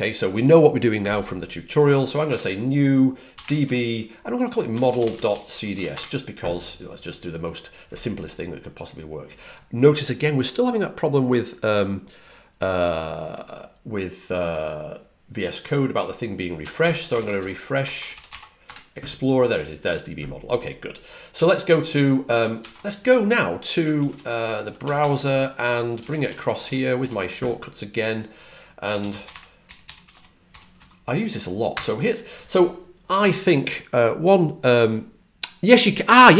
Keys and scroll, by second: 2.2 super+n, 3.1-6.3 typing, 16.7 shift+super+p, 17.3-19.1 typing, 22.6 super+Tab, 23.9 super+Tab, 24.0 super+Tab, 24.9 super+n, 26.2 ctrl+alt+super+Left, 26.5 alt+super+Right, 26.9 alt+super+Right, 28.6-32.1 typing.